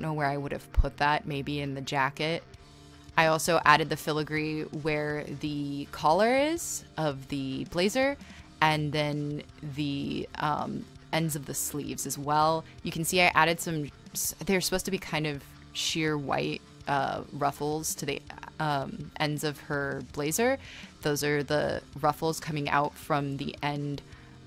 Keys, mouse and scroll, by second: 1.6 right click, 4.4-4.7 scroll, 7.7 ctrl+z, 8.2-9.7 typing, 10.3 ctrl+z, 13.1 e, 14.7-18.4 typing, 24.0-24.4 typing.